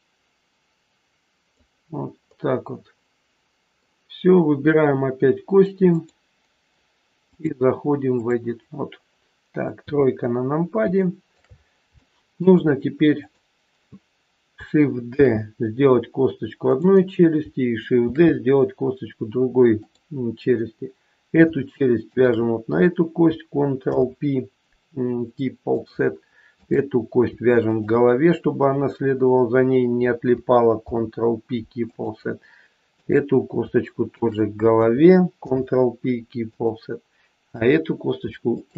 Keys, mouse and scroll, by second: 2.2 middle click, 5.8 click, 7.2 click, 9.7 KP_3, 10.2-10.8 scroll up 2, 11.0 shift+middle click, 11.4-11.8 scroll up 2, 12.0 shift+middle click, 13.2 click, 15.1 shift+d, 17.9 shift+d, 21.9 shift+click, 23.7 ctrl+p, 26.6 click, 27.6 shift+click, 30.8 ctrl+p, 32.9 click, 34.1 shift+click, 35.5 ctrl+p, 37.6 click, 38.6 shift+click.